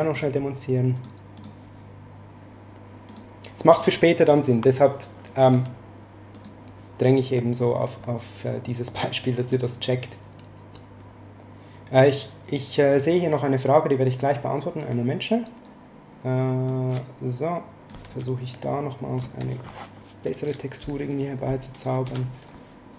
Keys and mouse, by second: 0.1 click, 3.1 click, 6.3 click, 9.5 click, 16.7 click, 22.0 b.